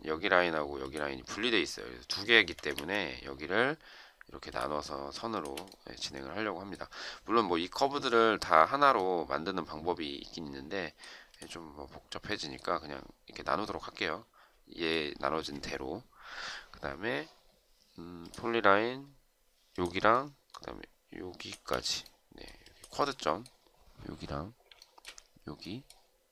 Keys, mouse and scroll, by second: 2.3 Escape, 2.6 Escape, 5.1 shift+click, 21.5 space, 24.6 shift+right click.